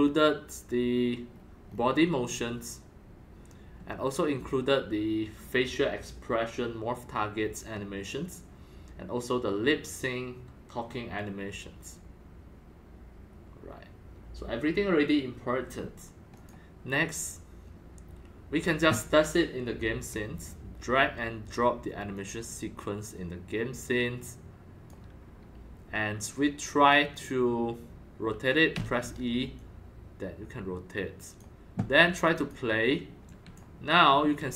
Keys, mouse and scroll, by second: 0.6-1.6 scroll down 5, 1.6 scroll up 1, 1.6 scroll, 1.7 scroll up 2, 1.8 scroll, 1.9 scroll, 2.2 scroll down 1, 3.8 scroll, 16.3 click, 18.6-20.8 drag, 22.1-25.0 drag, 27.7 click, 28.7 e, 29.5-31.4 drag, 32.3 click, 33.2 click, 33.4-34.5 typing.